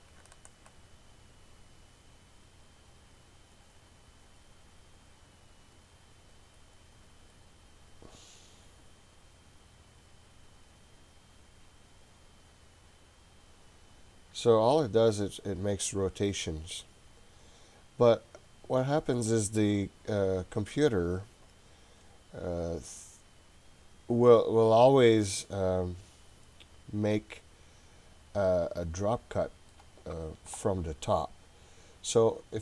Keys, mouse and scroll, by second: 0.2 Left, 2.6 click, 2.9 click, 3.2 click, 3.6 click, 3.8 click, 4.0 click, 4.1 click, 4.3 click, 4.4 click, 4.6 click, 4.8 click, 4.9 click, 5.1 click, 5.3 click, 5.4 click, 5.6 click, 5.8 click, 6.0 click, 6.4 click, 6.6 click, 6.8 click, 7.0 click, 7.2 click, 7.4 click, 8.6-16.6 drag, 17.6-19.3 drag, 20.3 click, 25.1-29.8 middle drag.